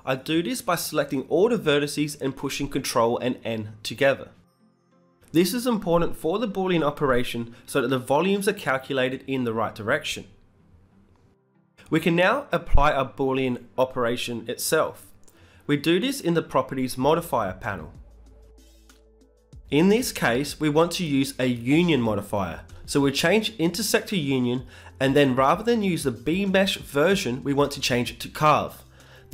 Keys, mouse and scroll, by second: 5.1 Tab, 6.3 ctrl+Up, 8.1-29.3 drag.